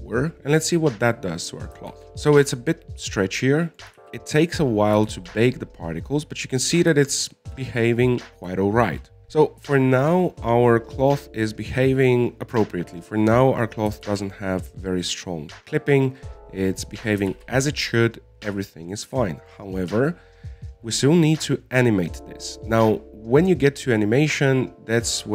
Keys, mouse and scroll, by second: 2.1-4.7 middle drag, 4.7 alt+a, 5.8 click, 6.4 alt+a, 7.2-9.2 middle drag, 9.2 click, 10.4-12.2 scroll down 3, 12.2-15.3 scroll up 3, 15.4 alt+a, 15.9-18.7 middle drag, 18.7 alt+a, 19.0-23.6 middle drag, 23.9 scroll up 2, 24.9-25.3 drag.